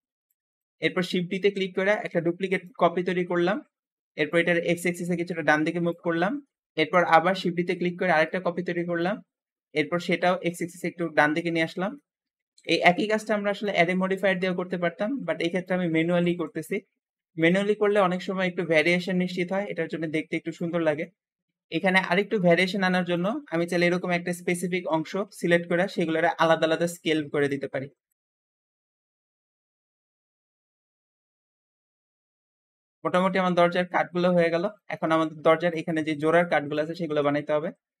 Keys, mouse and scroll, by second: 0.5 middle click, 1.2 shift+d, 4.2 click, 6.1 shift+middle click, 6.7 ctrl+z, 7.0 d, 8.8 shift+click, 11.5 middle click, 12.2 shift+d, 13.5 shift+click, 15.9 shift+d, 17.3 shift+click, 20.9 middle click, 21.6 middle click, 22.5-23.0 scroll up 1, 23.0 click, 24.2 l, 25.5 s, 25.8 x, 28.0 click, 28.2 shift+middle click, 28.7 s, 28.8 x, 29.8 click, 30.2 l, 30.6 s, 30.6 s, 30.8 x, 31.7 click, 31.9 middle click, 31.9 l, 32.6 Tab, 32.7 Tab, 32.9-34.2 middle drag, 34.2 Tab, 34.3 Tab, 34.6-38.0 shift+middle drag, 37.2 Escape.